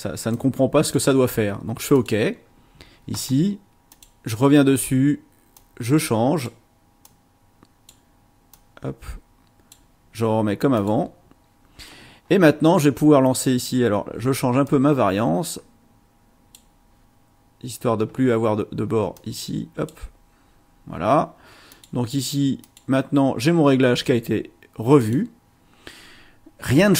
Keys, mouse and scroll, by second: 0.3-1.1 drag, 1.9 click, 3.9 click, 5.5 click, 7.0 click, 8.5-9.9 drag, 10.7 click, 14.6-16.7 drag, 19.1 click, 21.7 click, 22.6 click, 25.0 click.